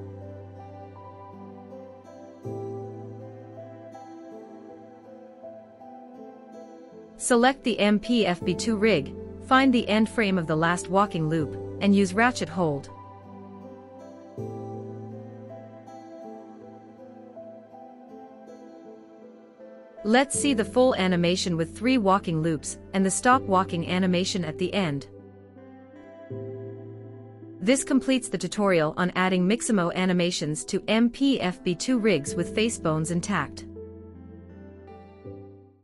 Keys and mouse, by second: 0.6 space, 1.4 click, 3.1-3.6 shift+middle drag, 7.5 middle click, 9.1 Right, 9.6 Right, 10.1 Left, 13.0 click, 15.0 Right, 15.3 Right, 15.7 Left, 15.9 Left, 16.1 Left, 16.3 Left, 16.4 Left, 16.6 Left, 16.8 Left, 17.0 Left, 17.2 Left, 17.4 Left, 18.6-19.0 shift+drag, 20.5 space, 22.3-23.1 shift+middle drag, 23.3 space, 24.8 click, 25.6 space, 31.3 space.